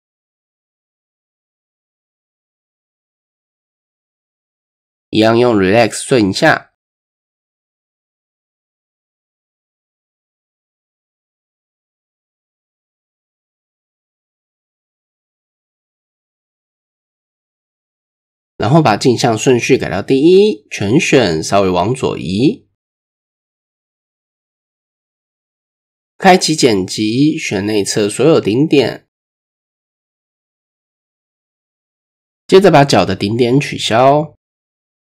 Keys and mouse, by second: 0.1 middle click, 1.2 middle click, 1.9 shift+middle click, 2.3 middle click, 3.9 click, 5.8-7.4 drag, 7.4 middle click, 7.9-9.0 middle drag, 9.2 middle click, 10.8 shift+KP_1, 12.3 KP_3, 13.5 KP_1, 15.2-15.6 shift+middle drag, 17.9-19.1 drag, 20.0 KP_3, 21.3 a, 22.9-25.3 drag, 26.7 click, 28.3 click, 28.9-30.0 drag, 30.5 middle click, 31.5-31.9 middle drag, 32.6 KP_1, 34.4 shift+middle click, 34.8 middle click.